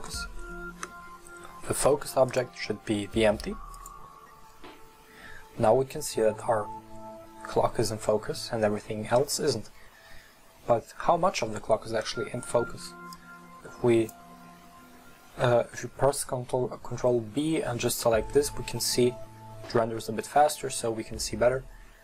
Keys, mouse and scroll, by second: 2.2-5.3 drag, 12.8 ctrl+b.